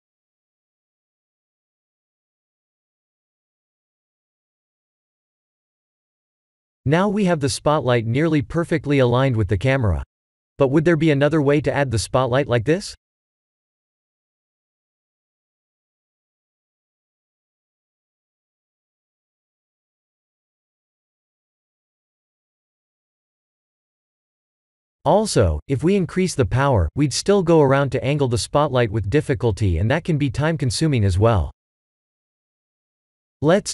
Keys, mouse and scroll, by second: 1.3 middle click, 2.4 r, 5.2 middle click, 6.5 KP_0, 9.9 middle click, 11.9 s, 13.6 middle click, 14.1 middle click, 15.2 KP_0, 16.9 click, 19.8 click, 20.6 click, 21.0 1, 21.1 1, 22.4 click, 22.9 1, 23.0 1, 23.3 1, 27.9 middle click, 29.9-31.0 scroll down 7, 31.3 x.